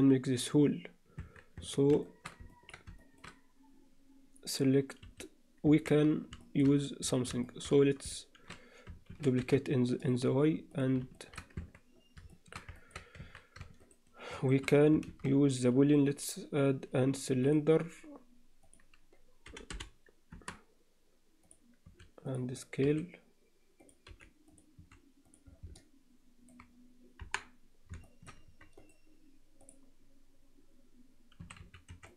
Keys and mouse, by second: 1.2 Tab, 1.6 Tab, 2.0 shift+middle click, 2.5 ctrl+middle click, 3.0 shift+middle click, 5.0 3, 5.6 Tab, 6.4 shift+middle drag, 7.4 shift+middle drag, 9.1 shift+d, 11.2 alt+shift+middle drag, 11.6 Tab, 12.3 shift+middle click, 12.8 ctrl+alt+middle click, 13.2 Tab, 13.8 shift+right click, 15.0 shift+a, 18.6-20.6 drag, 21.4 click, 21.8 s, 22.8 s, 24.1 g, 24.8 s, 25.8-26.5 alt+middle drag, 27.8 KP_1, 28.0 alt+shift+middle click, 28.8-29.7 right drag, 31.4 s.